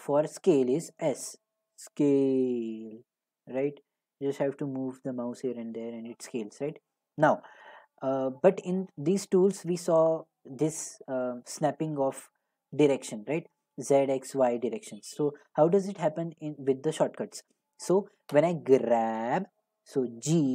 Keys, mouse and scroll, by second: 1.1 s, 6.6 right click, 9.6 click, 15.4 click, 18.3 click, 18.8 g.